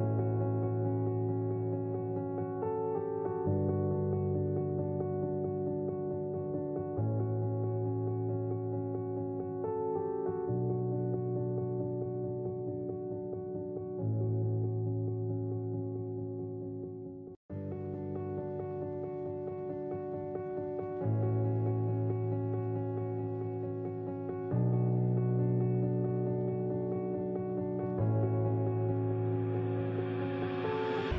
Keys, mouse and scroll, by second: 0.5 shift+middle click, 1.8 click, 2.9 click, 4.1 click, 4.8 click, 5.4 Delete, 6.0 click, 6.2 click, 6.9 2, 7.5 click, 7.9 click, 9.8-12.2 drag, 13.1 click, 13.7 click, 15.0 shift+middle click, 15.5 middle click, 16.2-20.4 drag, 19.0 3, 21.1 click, 22.0 middle click, 22.7 Tab, 24.6-25.9 drag, 26.5 Tab, 27.2-28.6 drag, 28.8 Tab, 29.3 click, 29.5 click, 30.4 click, 30.5 Tab, 30.5 /.